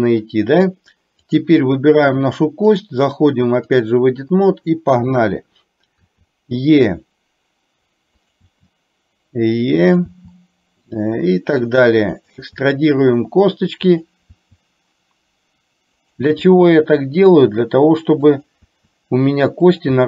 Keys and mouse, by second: 1.4 click, 2.8-3.9 drag, 18.8 e.